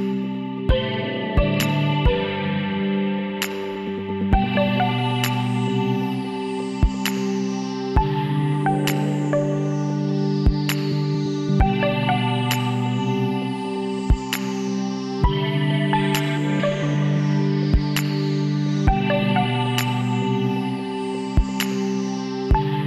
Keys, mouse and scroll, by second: 1.4 ctrl+r, 4.3-5.5 drag, 5.1 middle click, 5.5 KP_1, 6.0 middle click, 6.8 e, 9.2-13.7 middle drag, 13.7-15.6 drag, 15.6 middle click, 15.9 click, 15.9-22.8 right drag.